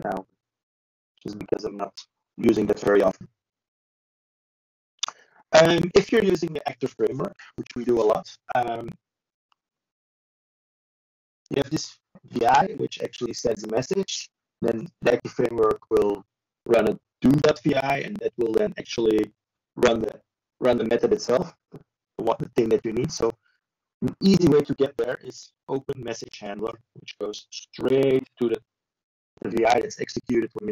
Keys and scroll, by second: 10.5 ctrl+c, 10.9 ctrl+n, 13.5 ctrl+v.